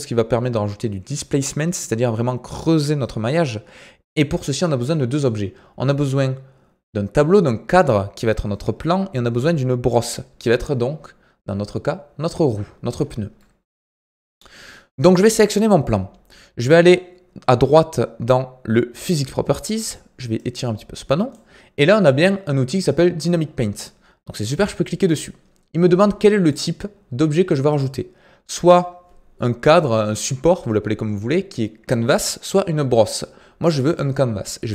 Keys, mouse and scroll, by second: 15.2 click, 19.0 click, 20.3-34.7 drag.